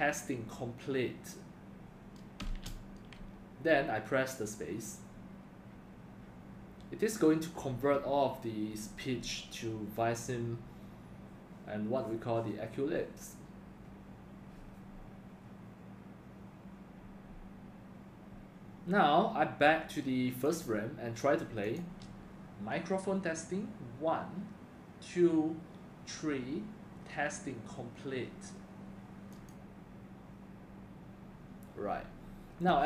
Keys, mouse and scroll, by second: 2.4 space, 20.4 click, 21.6 click, 29.3 click.